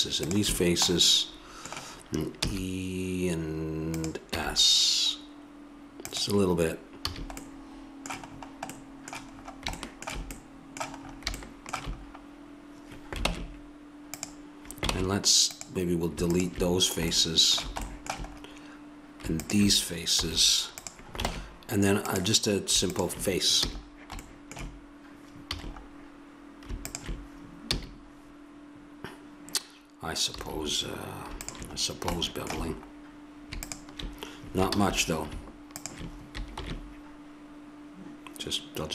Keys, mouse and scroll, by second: 0.9 click, 2.4 e, 4.2 s, 7.1 a, 13.2 ctrl+Tab, 17.2 click, 19.4 middle click, 20.2 x, 21.3 ctrl+Tab, 23.6 f, 25.5 a, 26.8 right click, 27.0-28.6 drag, 27.7 f, 30.4 a, 31.4 click, 32.1-33.4 middle drag, 33.6-34.8 middle drag, 34.8 ctrl+z, 36.5 ctrl+b.